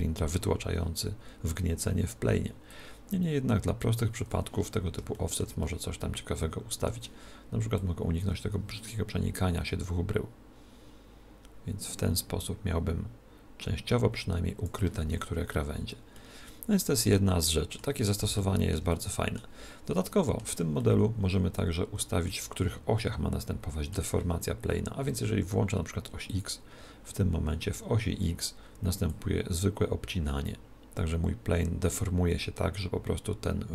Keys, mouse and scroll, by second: 2.8 click, 4.9 middle click, 5.2-7.8 middle drag, 7.8 click, 15.3-22.7 middle drag, 23.0-24.9 middle drag, 26.3 click, 29.2 click.